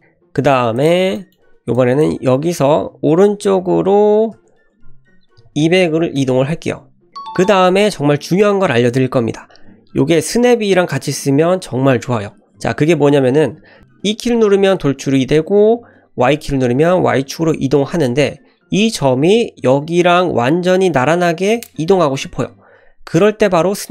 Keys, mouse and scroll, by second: 0.8 click, 1.2 shift+middle click, 1.8 click, 4.2 e, 12.4 f, 13.8 click, 13.9 e.